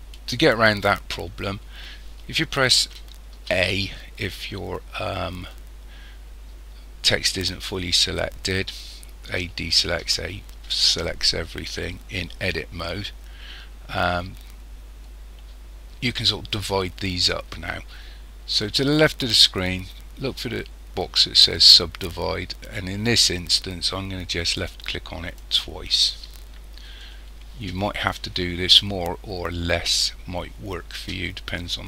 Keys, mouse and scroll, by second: 1.0 scroll down 1, 3.3 a, 9.2 a, 10.0 a, 24.5 click, 25.4 click.